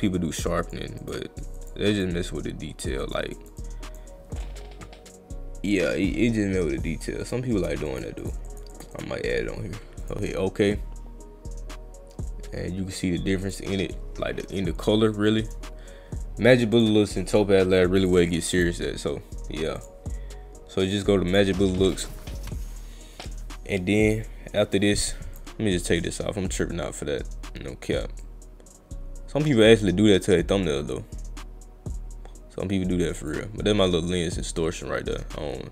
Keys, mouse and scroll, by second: 0.6 click, 1.0 click, 1.6 click, 1.9 click, 3.0 click, 3.4 click, 3.6-4.0 drag, 7.2 click, 7.5 click, 7.9 click, 8.2 click, 8.5 click, 8.7 click, 8.9 click, 10.0 click, 13.4 click, 15.5 click, 16.8 click, 18.0 click, 18.6 click, 19.8 click, 21.3 click, 25.4 click, 28.2-29.9 drag, 30.5-33.3 drag.